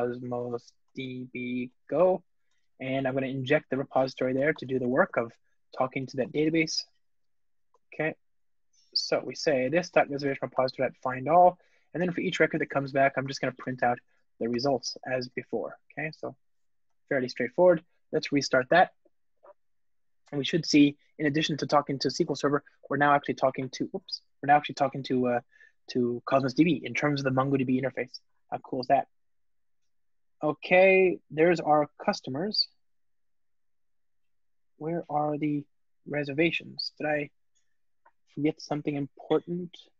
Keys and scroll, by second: 2.6 alt+super+l, 4.3 Return, 7.2 shift+Return, 7.8 Return, 15.1 alt+super+l, 15.6 alt+shift+Right, 16.6 alt+super+l, 18.2 ctrl+r.